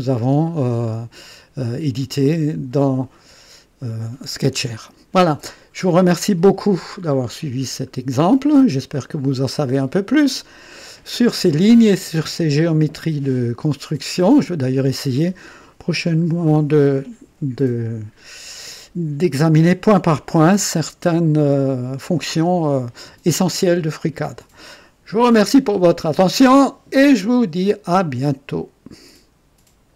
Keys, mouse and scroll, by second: 0.4-3.1 drag, 7.1 scroll up 1, 7.6-8.0 scroll down 1, 8.4 right click, 9.6 click, 13.3-15.0 drag, 28.5 right click, 29.9 click.